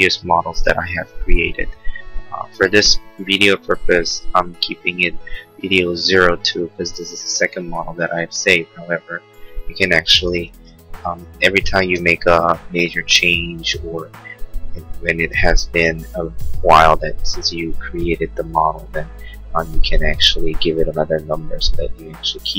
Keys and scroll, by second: 10.5 Right, 10.7 Left, 12.4 BackSpace, 13.5 3.